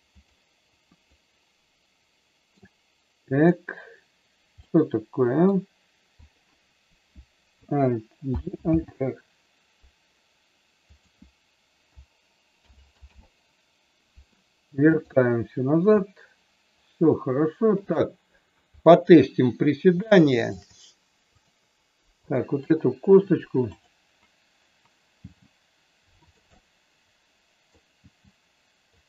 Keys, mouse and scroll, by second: 0.1 click, 1.1-2.5 middle drag, 3.3 click, 4.5 middle click, 8.3 alt+g, 8.7 alt+r, 10.8-12.2 drag, 12.6 alt+g, 13.1 alt+r, 14.9 click, 20.0 shift+middle click, 21.3-22.8 drag, 25.4 g, 26.2 click, 26.4-27.7 middle drag, 27.9 g, 28.9 click.